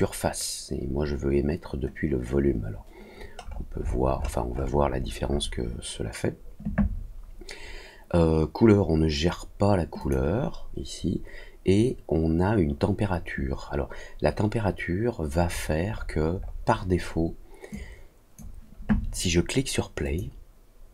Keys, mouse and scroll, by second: 3.3 scroll up 1, 3.5-3.8 scroll down 2, 3.8-5.4 scroll up 5, 9.9 click, 15.4 scroll up 2, 15.8 scroll down 2, 15.9-16.6 scroll up 4, 17.7 click, 20.0 click.